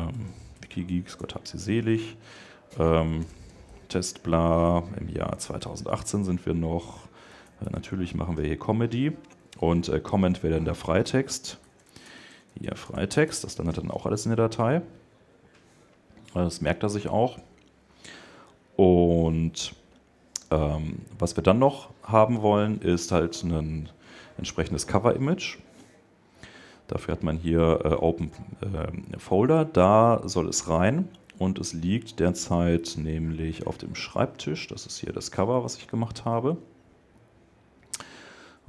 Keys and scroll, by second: 1.0 Tab, 4.3 Tab, 6.0 Tab, 6.8 shift+Tab, 9.0 Tab.